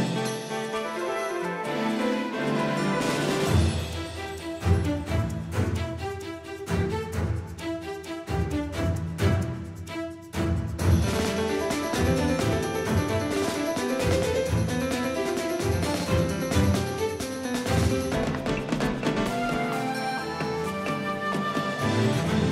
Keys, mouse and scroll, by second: 2.2-4.4 drag, 7.9 KP_3, 9.9-12.1 drag, 12.1-13.6 middle drag, 13.6-18.1 drag, 13.6 right click, 13.7-15.6 middle drag, 17.0-18.4 middle drag, 21.4 KP_1.